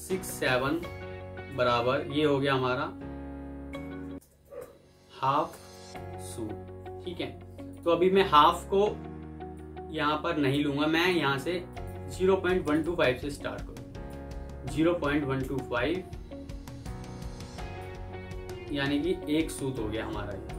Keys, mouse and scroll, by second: 0.0-0.1 typing, 1.4 typing, 2.5 typing, 3.6-6.1 typing, 11.6 ctrl+right click, 12.7 double click, 14.7-15.3 typing, 19.0 typing.